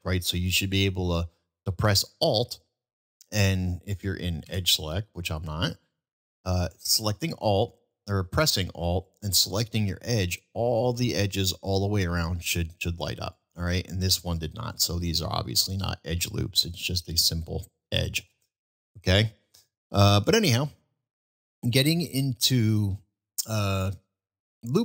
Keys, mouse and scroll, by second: 2.9 alt+click, 5.3 click, 9.6 alt+click, 11.7-12.7 middle drag, 14.3-14.7 middle drag, 15.2 middle drag, 16.2-16.7 middle drag, 18.5-18.9 shift+middle drag, 19.2 middle drag, 21.7-22.2 middle drag, 23.0 shift+middle drag, 23.6-24.0 shift+middle drag.